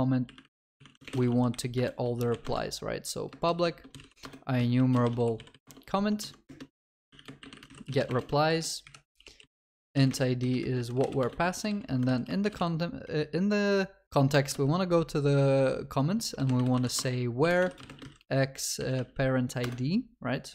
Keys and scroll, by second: 1.4 ctrl+s, 2.5 Return, 12.0 Return, 14.4 Return.